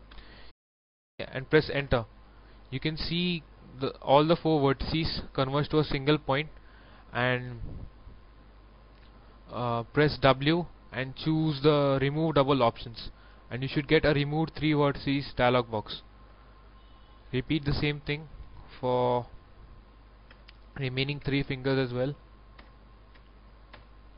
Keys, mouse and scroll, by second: 0.1 0, 1.7 Return, 2.6 scroll up 1, 3.0 shift+middle click, 4.2 shift+middle click, 5.1 shift+middle click, 5.8 scroll down 1, 10.1 w, 12.1 click, 15.9 shift+middle click, 16.8 alt+right click, 17.7 alt+e, 18.0 click, 18.4 s, 20.4 KP_0, 21.0 0, 21.6 w, 22.5 Return.